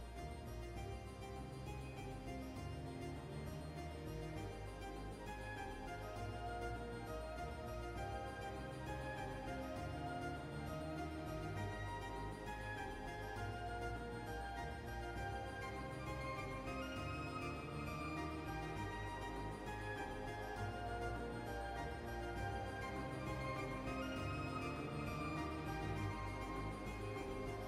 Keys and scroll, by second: 7.7 typing, 21.1 typing.